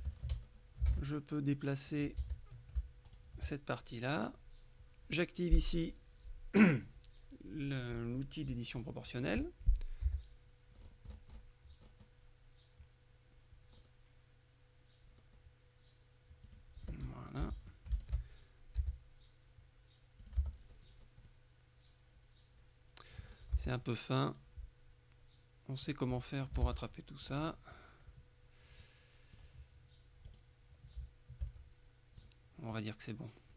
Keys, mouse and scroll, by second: 0.0 shift+middle click, 0.5-0.9 shift+scroll up 1, 0.9 ctrl+Tab, 2.0 click, 2.3 a, 3.2 alt+shift+right click, 5.9 click, 8.9 click, 10.1 g, 10.9-12.5 scroll up 1, 13.9-14.5 scroll up 1, 15.3-15.8 scroll up 1, 16.5 click, 17.5 a, 18.0 alt+shift+right click, 18.9 g, 20.3 click, 20.5 Tab, 20.6-21.3 scroll down 1, 21.3 middle click, 23.4-23.9 scroll up 1, 23.6 Tab, 23.9-26.3 middle drag, 26.3 click, 26.7 ctrl+Tab, 27.3-28.3 drag, 28.9-29.9 middle drag, 30.3 right click, 31.6-32.8 shift+middle drag.